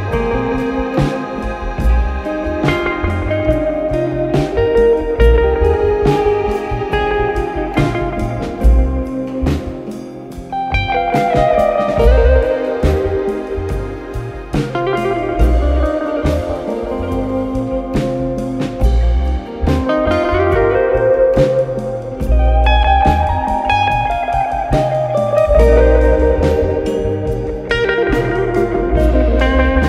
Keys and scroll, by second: 1.4 ctrl+z, 8.9 3, 10.4 5, 11.3 F1, 16.0 4, 17.1 5, 19.2 4, 23.4 2, 24.6 ], 25.7 4.